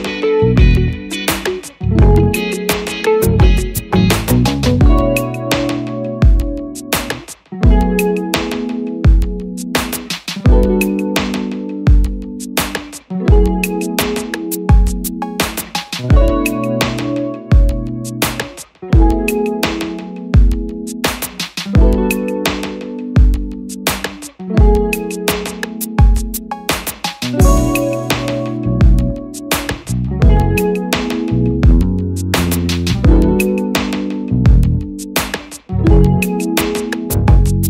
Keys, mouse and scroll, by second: 4.2 double click, 24.4 double click.